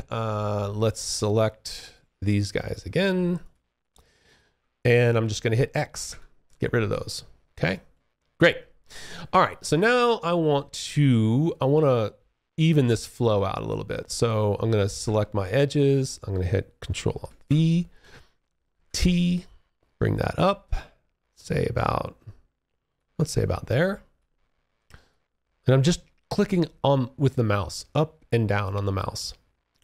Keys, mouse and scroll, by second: 0.1 click, 1.8 shift+click, 2.6 shift+click, 3.4 shift+click, 5.2 x, 5.7 alt+click, 7.1 alt+middle click, 8.5 alt+click, 15.0 click, 16.4 ctrl+shift+v, 17.9 alt+t, 18.3 click, 22.4 alt+click, 24.2 click.